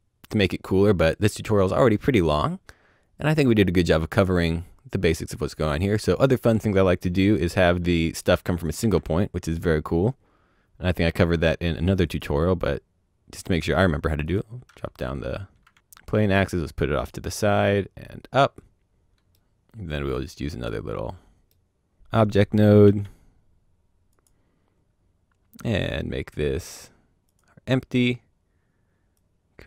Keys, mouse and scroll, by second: 7.2 scroll down 1, 7.6 shift+middle click, 8.4 click, 8.7 shift+a, 12.0 click, 14.2 click, 16.2 click, 18.8-19.3 scroll down 2, 20.9 middle click, 21.9 click, 22.8 shift+d, 24.0 click, 24.5 scroll, 24.5-25.7 scroll up 1, 25.7 click, 27.2 click, 29.1 click.